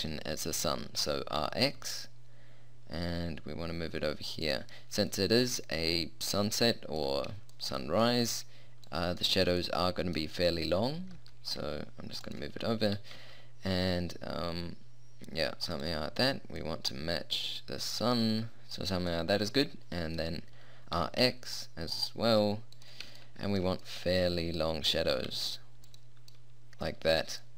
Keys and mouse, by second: 1.4 r, 5.6 middle click, 6.7-7.7 middle drag, 9.3-10.7 drag, 11.1 g, 13.0 r, 16.7-18.2 middle drag, 18.2 middle click, 18.5-19.9 middle drag, 21.0 r, 25.1 r.